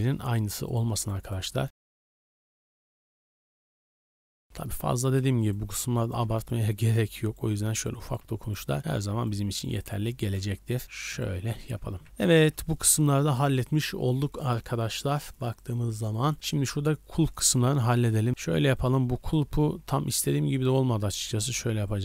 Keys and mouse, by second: 0.0-4.7 typing, 0.4 click, 1.2 click, 1.7 shift+click, 2.6 shift+click, 3.1 shift+middle click, 3.4 Tab, 3.5 click, 3.6 Tab, 3.6 middle click, 3.7 click, 3.7 Tab, 4.3-5.9 drag, 6.1 click, 6.2 g, 6.9 click, 7.3 click, 7.4-11.9 typing, 8.1 click, 8.8 click, 9.6 click, 10.4 click, 11.4 Tab, 17.1 middle click, 17.5 drag, 18.3 shift+b, 19.5 Tab, 21.1 KP_Decimal.